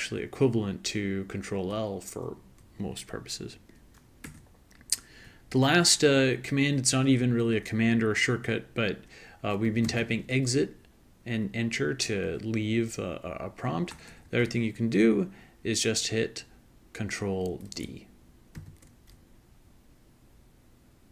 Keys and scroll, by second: 0.0-0.5 typing, 4.2 Return, 9.4-10.6 typing, 14.0 BackSpace, 14.1-14.4 BackSpace, 14.2 BackSpace, 14.4 BackSpace, 18.6 ctrl+d.